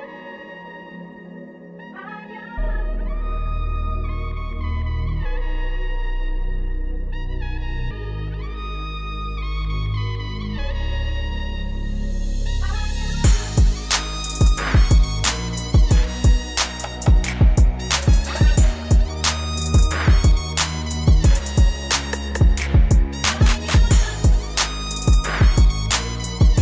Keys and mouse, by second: 0.9 right click, 4.0 right click, 15.1 KP_Subtract, 15.3 KP_Subtract, 16.0 KP_Subtract, 16.3 KP_Subtract, 17.6 KP_6, 18.0 KP_6, 18.3 KP_6, 18.7 KP_6, 21.3 right click, 24.0 e, 25.5 z.